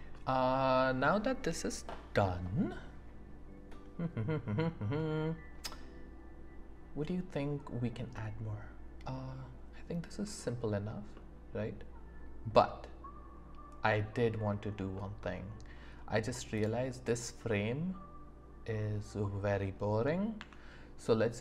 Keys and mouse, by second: 0.1 shift+middle click, 8.1-10.1 drag, 8.1-10.1 right drag, 10.1 shift+middle click, 10.4 shift+middle click, 11.1-14.4 middle drag, 14.9-15.8 middle drag, 16.5 click, 17.5-19.8 middle drag, 20.4 Tab.